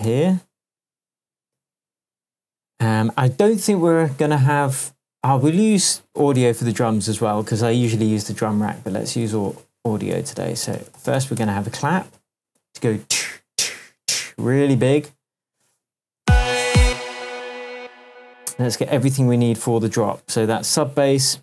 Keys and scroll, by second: 0.0 super+BackSpace, 0.9 BackSpace, 1.5 super+v, 6.4 BackSpace, 7.8 super+t, 9.4 super+r, 10.1 shift+super+r, 10.5-11.6 typing, 16.2 space.